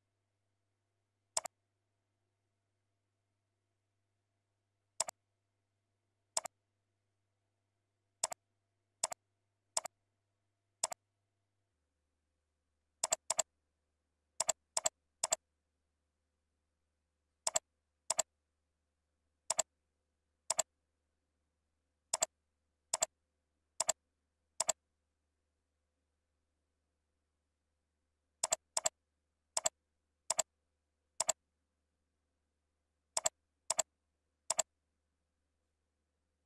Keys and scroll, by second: 2.8 shift+F3.